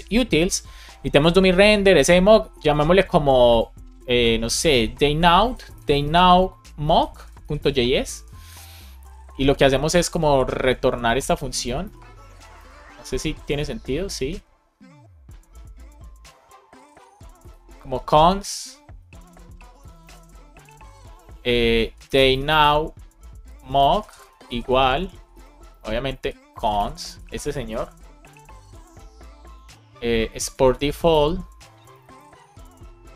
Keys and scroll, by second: 5.9 shift+n, 6.8 shift+m, 8.1 Return, 11.8 shift+super+Right, 12.5 super+c, 18.9 BackSpace, 20.1 space, 22.4 shift+n, 23.6 shift+m, 24.1 space, 25.3 super+v, 25.7 super+Left, 26.1 alt+shift+Right, 27.0 super+s, 28.2 alt+shift+f, 28.7 super+s, 30.3 Return, 31.1 space, 32.2 space.